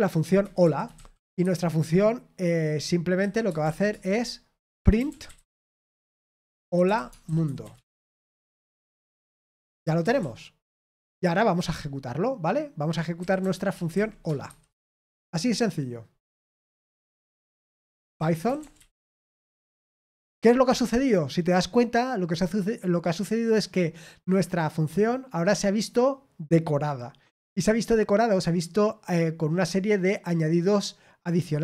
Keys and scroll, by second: 3.9 Return, 3.9 typing, 5.7-11.1 typing, 9.2 Escape, 14.8 Escape, 14.8 typing, 17.0 Return, 17.0-17.3 typing, 18.9 typing, 19.2 Right, 19.5 Return.